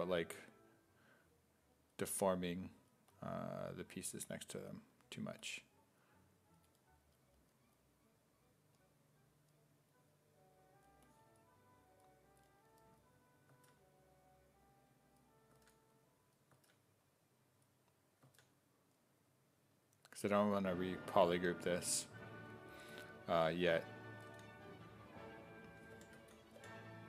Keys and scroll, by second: 13.5 s, 15.5 s, 16.5 s, 18.3 s, 24.3 w, 25.5-27.0 typing.